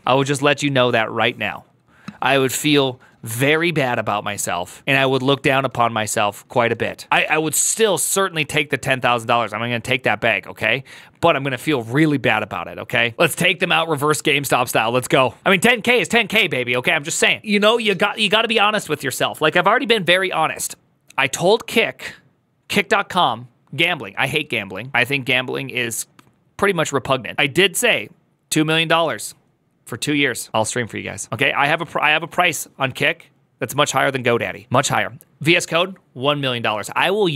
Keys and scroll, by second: 0.0 alt+f.